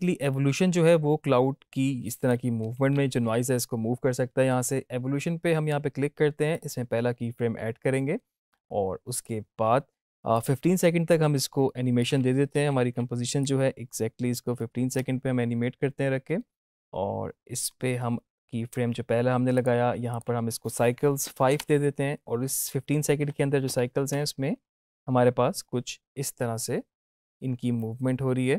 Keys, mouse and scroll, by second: 0.1-2.3 drag, 2.7 ctrl+z, 6.4-9.2 drag, 12.5 =, 12.8 =, 13.3-17.0 drag, 19.4 click, 23.6 Home, 24.0 space.